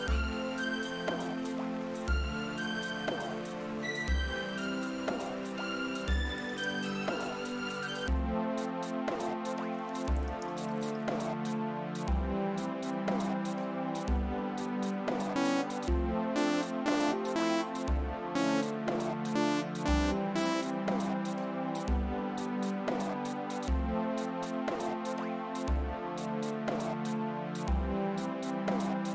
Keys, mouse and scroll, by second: 5.3 click, 5.8 space, 7.9 space, 9.6 space, 12.1 space, 13.1 click, 14.6 click, 15.3 space, 17.7 space, 20.8 space, 21.3 click, 28.7-29.1 drag.